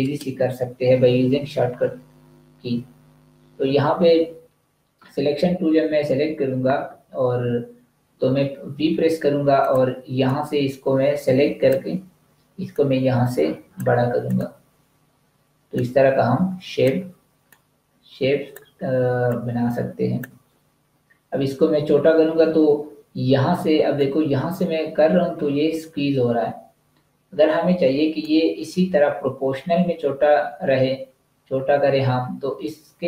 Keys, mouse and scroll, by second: 8.8 v, 9.6 click, 19.0 space, 19.2 click, 19.4 space, 23.8 click.